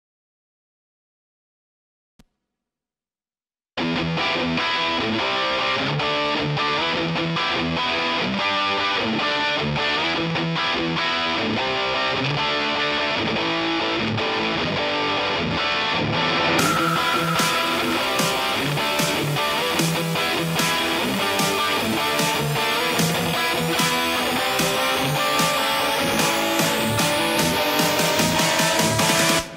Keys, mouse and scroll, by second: 1.9 middle click, 2.0 scroll up 1, 2.3 right click, 2.9 scroll down 3, 3.0 middle click, 4.1 middle click.